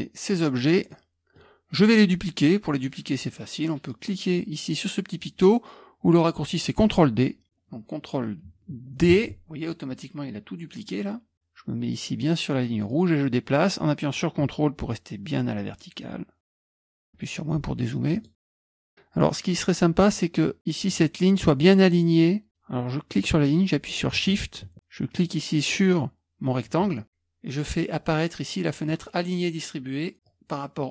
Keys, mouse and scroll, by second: 0.9 middle click, 1.2-8.7 drag, 9.2 ctrl+d, 12.9-16.5 drag, 16.6 click, 17.0 scroll down 1, 17.1 KP_Subtract, 17.7-18.1 scroll down 1, 18.1 click, 18.6-20.1 scroll up 1, 20.9-23.7 drag, 28.9 click, 30.2-30.9 drag.